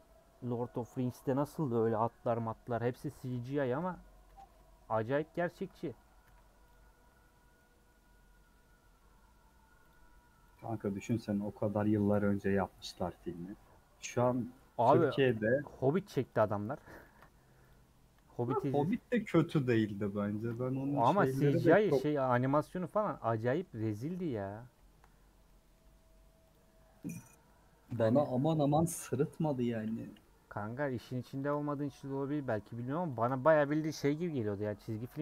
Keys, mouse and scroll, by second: 3.9 scroll up 2, 4.3 Tab, 4.7 middle click, 5.2-5.5 scroll up 1, 5.6-6.7 middle drag, 7.5-9.9 middle drag, 9.9 alt+click, 10.5 alt+click, 11.2-13.2 middle drag, 13.2-13.6 scroll up 2, 14.3 click, 14.6-16.3 middle drag, 16.3 ctrl+click, 17.0 ctrl+z, 17.7 click, 19.0 ctrl+click, 19.3-21.6 middle drag, 21.6 ctrl+click, 22.2 middle click, 22.6 scroll down 2, 22.8 middle click, 23.6-24.1 scroll up 1, 24.1 ctrl+z, 25.1-25.5 scroll up 2, 25.5-26.5 middle drag, 26.5 click, 27.9 click, 28.5-29.6 middle drag, 29.6 ctrl+click, 29.8-31.4 middle drag, 31.4 ctrl+click, 31.7-33.2 middle drag, 33.2 ctrl+click, 35.0 a.